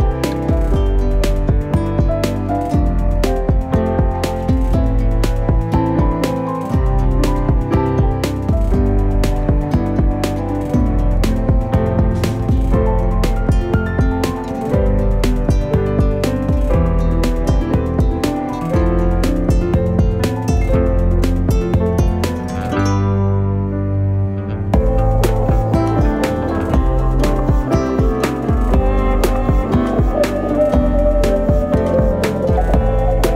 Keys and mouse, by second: 0.5 g, 2.0 alt+right click, 2.4 g, 3.5 r, 4.1 shift+middle click, 4.8 ctrl+r, 6.1 c, 7.1 g, 8.6 KP_1, 9.3 alt+z, 9.8 shift+middle click, 10.2 right click, 10.4 alt+z, 10.8 c, 13.0 g, 18.3 r, 19.8 alt+z, 20.3 a, 20.5 KP_3, 21.0 w, 22.8 s, 23.9 middle click, 24.8 shift+middle click, 25.6 right click, 26.0 c, 27.2 shift+middle click, 27.5 middle click.